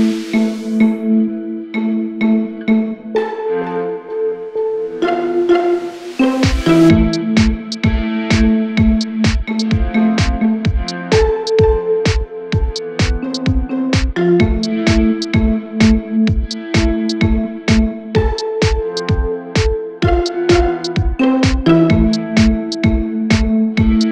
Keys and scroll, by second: 12.1-12.9 typing, 23.9 ctrl+r.